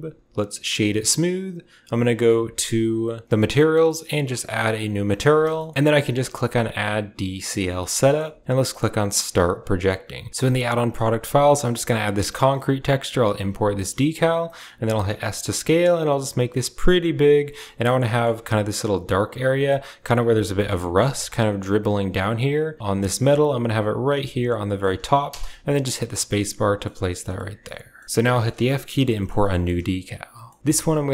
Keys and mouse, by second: 3.7 click, 4.8 click, 5.4 shift+middle click, 7.4 click, 7.8 shift+middle click, 9.2 click, 17.9-30.6 shift+middle drag.